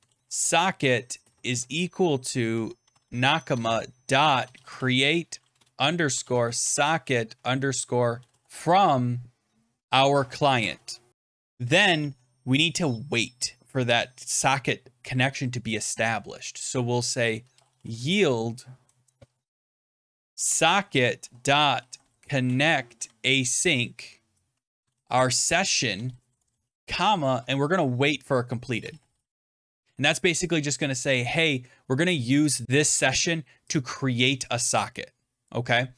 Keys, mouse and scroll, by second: 0.0-11.1 typing, 11.4 Return, 17.0-23.3 typing, 23.3 Tab, 24.5-25.3 typing, 25.8 Tab, 26.4 Right, 26.7-29.9 typing, 30.1 Return, 32.6 click, 32.8 typing, 33.2 click, 33.6 click, 35.4 click.